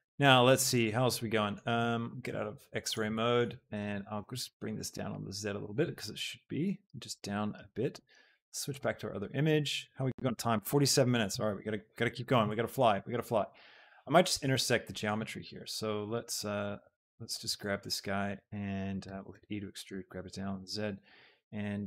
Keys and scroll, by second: 4.3 shift+z, 18.9 alt+e, 19.3 Escape, 20.0 z.